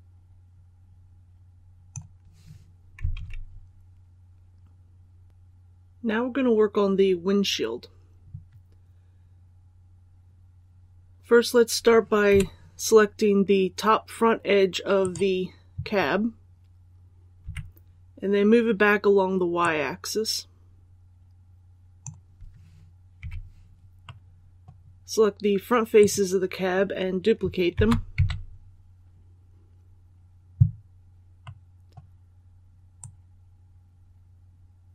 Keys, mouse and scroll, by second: 3.1 alt+a, 5.2 click, 12.2 2, 14.9 right click, 17.3 KP_3, 19.5-22.0 drag, 23.1 3, 23.9-25.0 middle drag, 25.9 right click, 27.6 shift+d, 31.3 middle click, 32.9-34.9 drag.